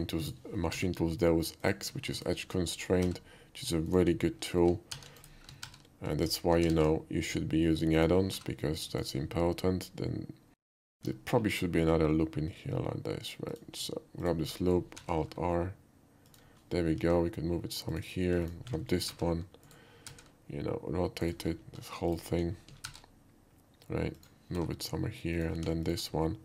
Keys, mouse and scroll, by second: 0.2 click, 0.7 g, 1.7 click, 2.2 alt+click, 3.0 g, 3.9 click, 5.0 alt+r, 5.2 alt+click, 5.7 alt+r, 6.3 alt+click, 6.8 alt+e, 8.0 click, 8.4 g, 8.9 click, 9.6 middle click, 10.8 alt+click, 11.3 ctrl+b, 13.5 click, 14.2 alt+click, 15.0 alt+r, 16.2 click, 16.9 g, 17.9 click, 18.5 click, 19.1 t, 19.6 right click, 20.1 r, 20.9 t, 22.9 alt+r, 24.2 click, 24.6 g, 25.4 click, 25.9 alt+click.